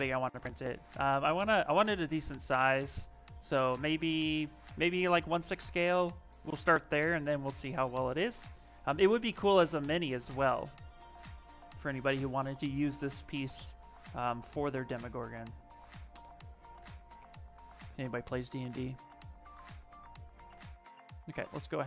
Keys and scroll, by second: 7.9 s, 12.1 s, 15.9 l, 16.9 a, 18.0 s.